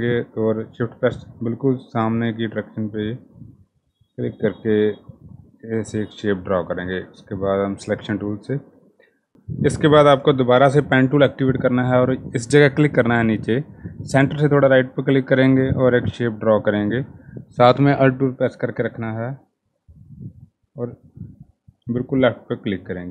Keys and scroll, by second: 8.8 p.